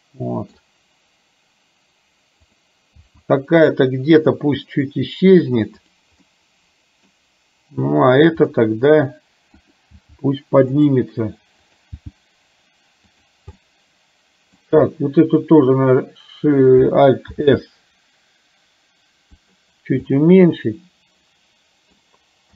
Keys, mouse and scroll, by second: 0.0 middle click, 2.6 click, 3.3 g, 6.5 middle click, 8.6 middle click, 9.8 click, 10.1 g, 11.9 click, 12.2 g, 13.6-14.7 middle drag, 17.3 alt+s, 20.2-22.1 middle drag.